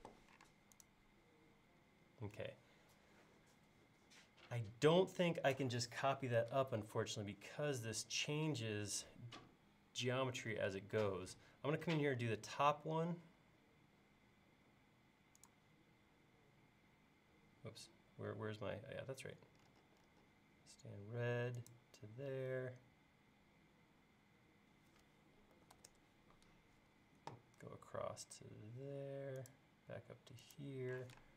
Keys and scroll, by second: 0.5 space, 12.2 l, 25.3-26.6 typing, 31.0 p.